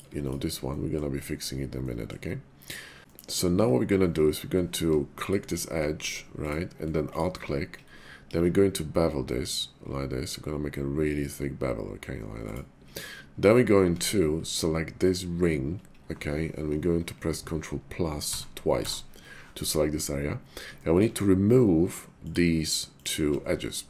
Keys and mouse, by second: 0.2 alt+click, 0.7 middle click, 1.8 middle click, 3.1 middle click, 5.0 click, 6.0 Tab, 7.0 alt+click, 8.2 ctrl+b, 12.4 click, 13.8 Tab, 14.9 alt+click, 18.1 ctrl+KP_Add, 18.7 ctrl+KP_Add, 20.8 shift+middle click.